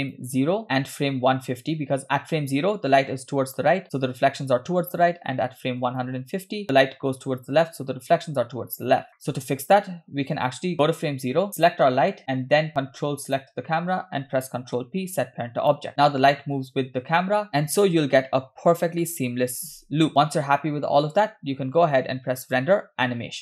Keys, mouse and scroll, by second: 0.0 click, 6.1 click, 8.9-9.9 scroll down 4, 10.7 click, 11.5 drag, 13.3 ctrl+click, 14.8 ctrl+p, 16.9 space, 17.6 space, 20.1 shift+middle click, 20.1-20.5 scroll up 3, 20.1 space, 20.5-21.1 scroll down 2, 22.5-23.4 drag.